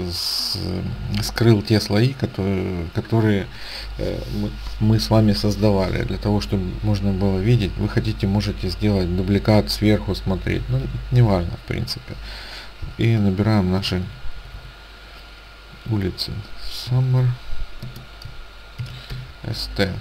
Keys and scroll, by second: 13.7-15.0 typing, 16.7-19.1 typing.